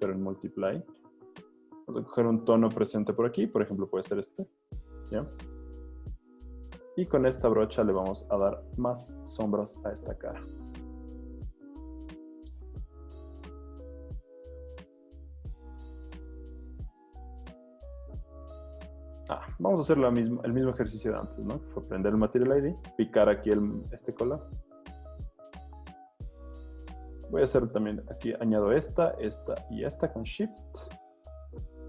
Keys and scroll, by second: 1.3 z, 3.3 i, 5.2 b, 8.2 super+z, 19.1 super+z, 22.5 w.